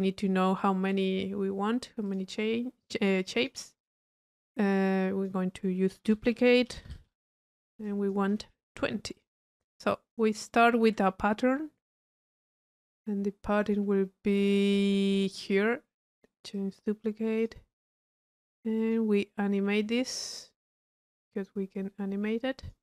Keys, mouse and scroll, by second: 0.1 Tab, 0.8 click, 2.1 click, 3.4 click, 4.4 middle click, 4.9 drag, 7.8 drag, 9.5 middle click, 9.9 click, 10.7 click, 12.0 click, 13.6 click, 14.5 click, 14.9 click, 16.1 click, 17.9 click, 18.8 click, 20.3 click, 20.9 click, 21.7-22.7 drag.